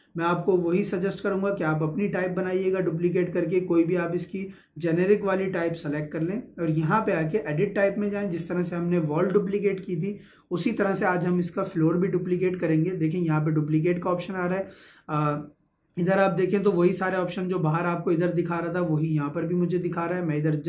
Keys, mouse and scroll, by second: 2.2 click, 7.2 click, 14.8 click, 19.9 Escape.